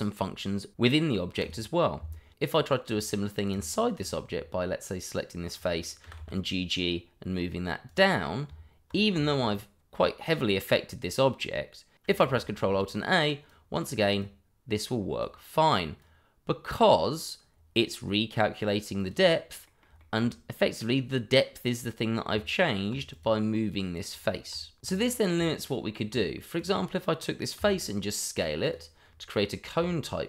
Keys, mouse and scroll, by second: 2.0 Tab, 3.1 Tab, 3.5 click, 4.1 shift+middle click, 4.2 middle click, 4.3 shift+middle click, 6.0 g, 7.8 click, 8.4 Tab, 9.2 shift+middle click, 10.9 middle click, 12.7 ctrl+alt+a, 13.4 click, 17.5-19.0 scroll down 1, 19.0 click, 19.6 middle click, 20.1 shift+middle click, 22.3 Tab, 23.1 click, 24.5 Tab, 25.1 click, 25.3 Tab, 26.6 click, 28.6 s, 28.6 click, 29.0-29.3 scroll down 1, 29.3 middle click, 29.7 Tab.